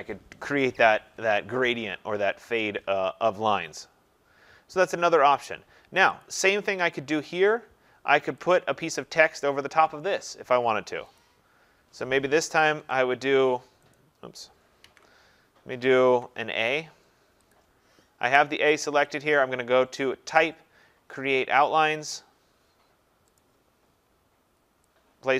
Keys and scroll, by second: 12.6 ctrl+shift+a, 14.8 ctrl+a.